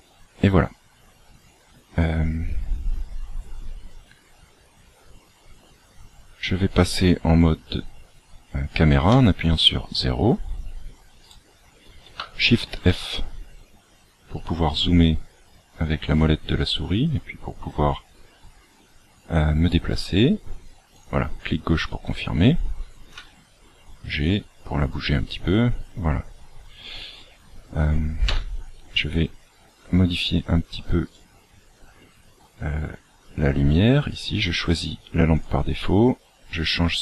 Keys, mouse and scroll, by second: 1.5 click, 4.1-5.6 scroll down 1, 9.1 KP_0, 11.2 right click, 12.6 shift+f, 23.1 g, 28.3 KP_7, 29.1-30.1 scroll down 15, 31.0 right click, 32.1-32.9 scroll down 2, 35.3 click.